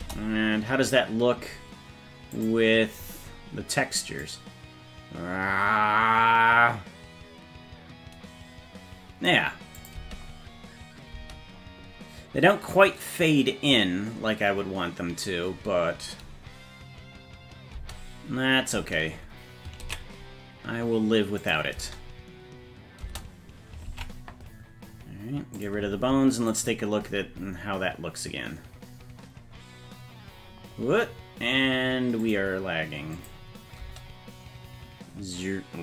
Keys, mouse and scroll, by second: 0.0 KP_0, 2.6 click, 4.3-9.4 drag, 9.8 click, 10.0 space, 11.2 space, 17.7 space, 18.8 space, 20.0 ctrl+s, 21.4 click, 21.8 space, 23.0 space, 23.9 ctrl+Tab, 25.6 click, 26.5 click, 27.9 scroll down 1, 28.8-29.5 scroll down 9, 29.5 scroll down 2, 31.5 scroll down 6, 32.2 click, 33.2 click, 33.8 space.